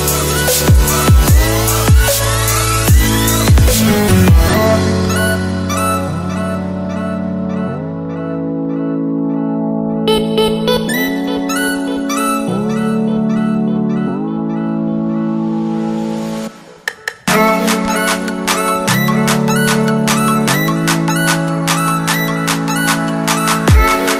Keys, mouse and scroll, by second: 6.3 click, 10.1 click, 13.4 t, 13.9 click, 18.5 Return, 19.4 click, 21.6-24.1 typing.